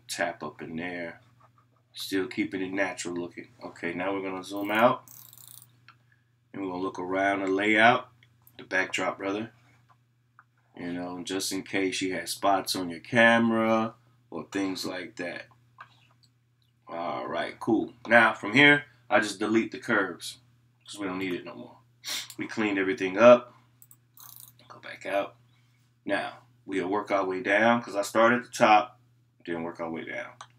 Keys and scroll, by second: 23.9 scroll up 1, 24.2 scroll down 1, 24.2 scroll up 1, 24.2 scroll down 1, 24.3 scroll up 1, 24.4 scroll down 1, 24.4 scroll up 1, 24.4 scroll down 1, 24.7-27.8 scroll up 1.